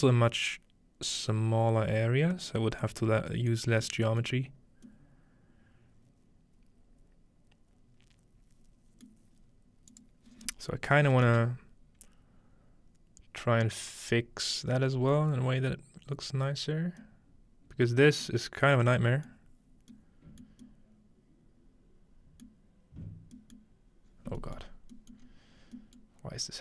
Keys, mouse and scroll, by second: 2.8 middle click, 4.6-6.3 scroll up 2, 9.3-11.1 middle drag, 9.9-11.1 drag, 15.5-18.0 scroll down 1, 17.0-18.8 middle drag, 18.6-19.6 scroll up 3, 19.3 middle click, 19.6-20.4 scroll down 2, 20.4 middle click, 20.4-22.4 scroll down 1, 22.5 middle click, 24.1-25.2 scroll down 3, 25.2 scroll up 2, 25.2-25.8 middle drag, 25.5 scroll down 1, 26.0 middle click, 26.2-26.5 scroll down 2.